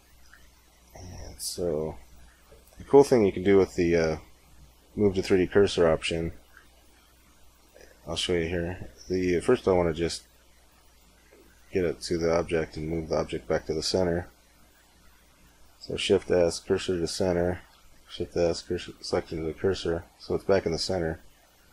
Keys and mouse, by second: 0.2 space, 6.4 space, 12.6 shift+s, 17.5 shift+s, 20.0-21.7 middle drag.